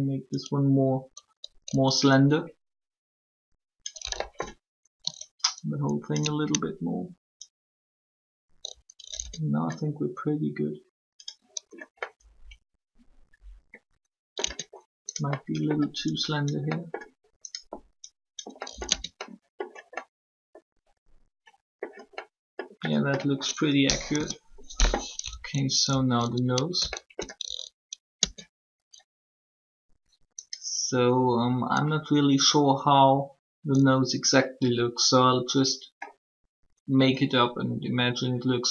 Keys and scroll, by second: 9.2 Tab, 14.4 Tab, 18.8 Tab, 23.8 3, 28.1 shift+Tab.